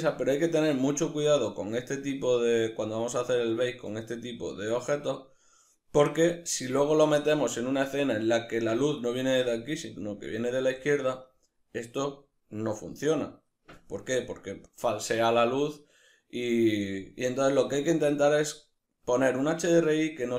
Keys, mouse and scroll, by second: 0.2-2.4 scroll down 2, 2.4-2.7 scroll down 1, 2.7-3.6 scroll up 2, 13.4-17.4 middle drag, 18.2-20.3 middle drag, 18.2-18.5 scroll down 2, 18.5-20.3 scroll up 2.